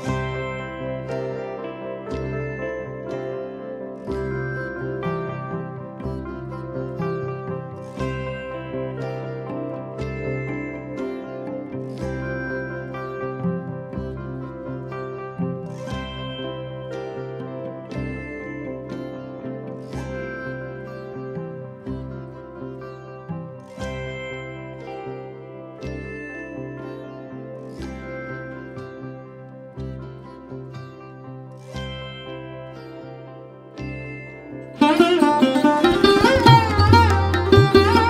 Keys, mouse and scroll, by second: 2.6 middle click, 3.3-4.0 scroll down 2, 4.6-6.1 scroll up 1, 9.9-13.7 drag, 16.4-20.9 middle drag, 22.0 click, 24.4 click, 26.3 click, 28.5 click, 29.2-31.1 drag, 32.6 click, 37.8-38.0 drag.